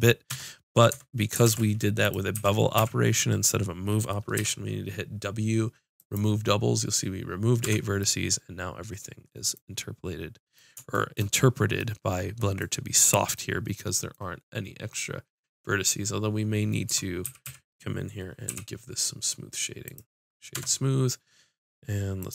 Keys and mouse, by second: 0.3 Tab, 0.9 Tab, 1.4 ctrl+Tab, 2.3 a, 2.7 a, 4.4 w, 5.9 click, 7.6 Tab, 8.9-10.1 middle drag, 16.8 Tab, 17.2 a, 17.4 a, 18.4 w, 20.5 Tab.